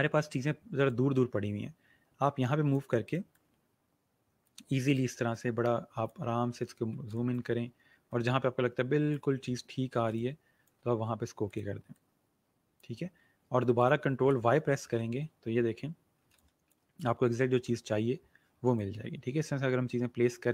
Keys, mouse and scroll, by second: 0.8 click, 6.3 alt+scroll up 1, 6.9 scroll up 1, 7.1 click, 9.6-10.0 alt+scroll down 2, 10.0 space, 10.1 click, 10.5 space, 11.4 click, 13.1-13.7 alt+scroll down 1, 13.7 click, 14.7 ctrl+y, 15.9-16.2 alt+scroll down 2, 16.2 space, 16.6-20.5 drag.